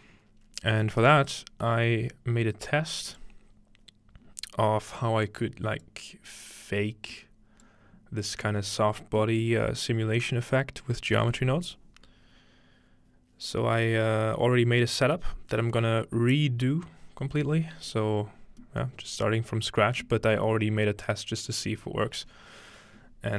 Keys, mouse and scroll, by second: 1.1-5.0 drag, 5.3-7.8 drag, 7.9-10.3 scroll up 3, 8.2-9.3 middle drag, 9.4-11.2 middle drag, 18.6-20.7 middle drag, 23.0-23.3 scroll down 1.